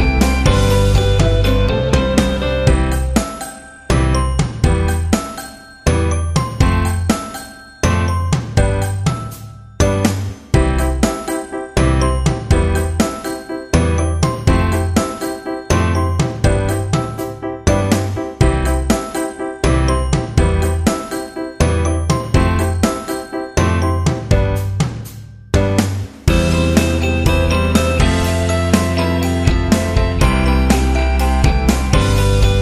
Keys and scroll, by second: 0.0 Return, 0.2 Return, 4.0 z, 14.8 v, 20.1 z, 21.6-22.3 typing, 23.4-24.7 typing, 27.7-29.1 typing, 30.5 ctrl+alt+z, 31.0 ctrl+alt+z, 32.1 v.